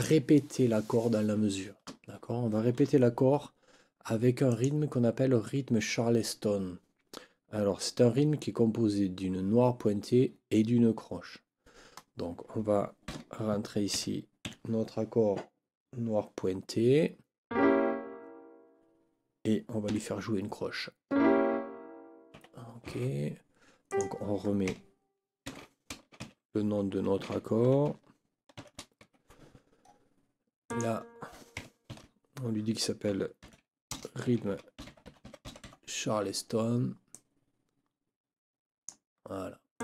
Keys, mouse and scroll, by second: 4.5 click, 13.1 n, 13.9 KP_5, 14.4 KP_Decimal, 19.9 KP_4, 22.3 Escape, 23.9 click, 25.5 ctrl+k, 26.2 shift+e, 27.7 shift+0, 29.0 shift+Escape, 30.7 click, 31.9 ctrl+t, 33.1-36.1 typing, 37.1-39.1 drag, 39.7 click.